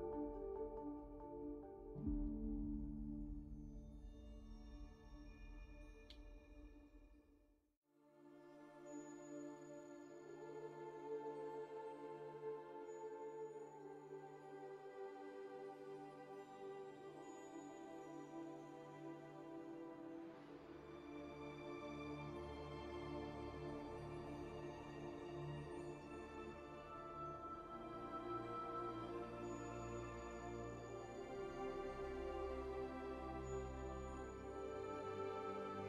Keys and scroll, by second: 2.8 w, 6.1 z, 13.3 3, 15.2 alt+a, 22.2 alt+a, 25.2 q, 25.9 x.